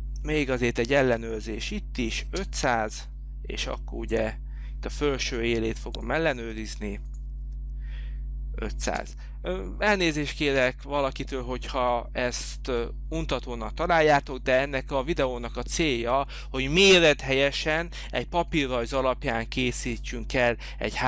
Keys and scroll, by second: 2.2 space, 9.0 space, 14.0 h.